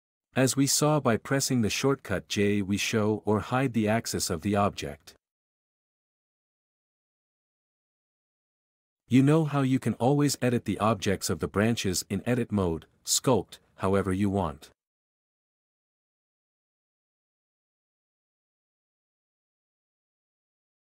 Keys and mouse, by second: 2.0-3.7 typing, 4.9-10.5 typing, 8.9 ctrl+n, 10.5 Tab, 10.6 alt+z, 10.6 alt+a, 11.6 x, 11.8 alt+z, 12.1 Tab, 13.3 q, 15.0 s, 15.3 x, 17.8 q, 19.2 r, 19.8 r, 20.1 Tab.